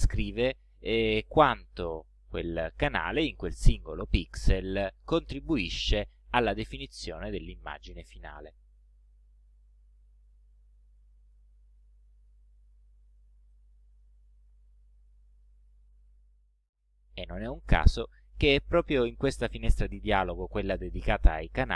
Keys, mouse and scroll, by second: 0.6 click, 1.3 click, 2.6 click, 5.3 click, 6.8-7.1 ctrl+scroll down 2, 8.8 click, 12.4 click, 13.7 click, 14.5-14.8 ctrl+scroll down 2, 15.1 ctrl+scroll up 2, 15.6 ctrl+scroll up 1, 19.3 click.